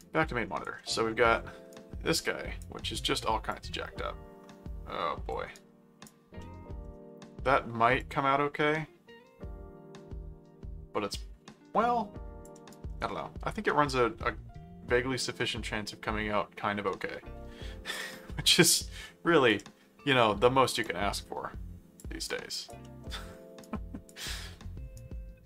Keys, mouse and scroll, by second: 0.0 right click, 0.8 middle click, 1.7 right click, 3.5-5.3 drag, 5.5 right click, 6.4 middle click, 8.0-12.4 drag, 12.7-17.9 right drag, 18.5 right click, 20.8 click, 22.3 right click, 22.8 middle click, 23.6 right click, 24.3 middle click, 24.9-25.4 right drag.